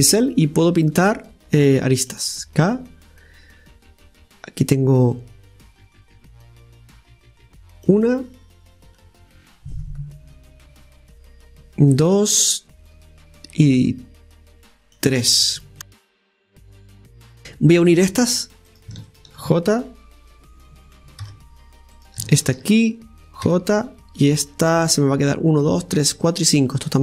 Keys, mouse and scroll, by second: 18.7-19.8 right drag, 21.9 right click.